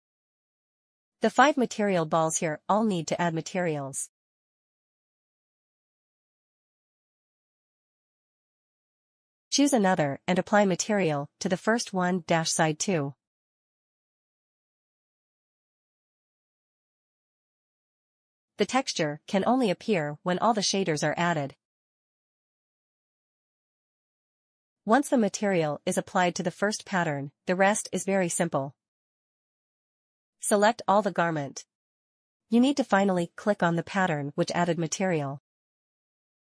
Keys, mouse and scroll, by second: 29.4 click, 30.8 shift+click.